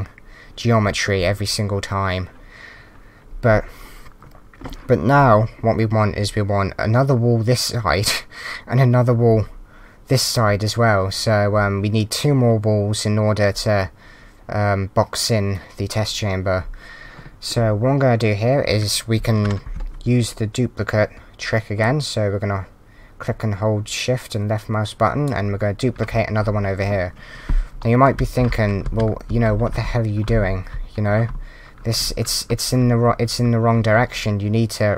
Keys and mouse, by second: 0.9 w, 5.3 w, 21.8 shift+click, 27.8-31.9 typing.